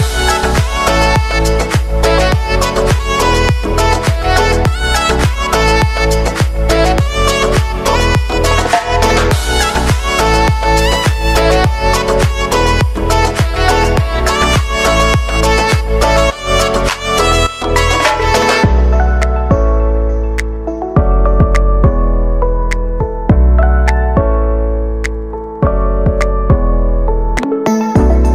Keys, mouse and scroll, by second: 0.0 ctrl+d, 0.5-2.8 drag, 2.8 space, 4.1 ctrl+d, 4.6-7.3 drag, 7.5 Return, 8.5 click, 12.2 space, 15.1 space, 16.7 click, 17.2 space, 24.3-28.3 drag.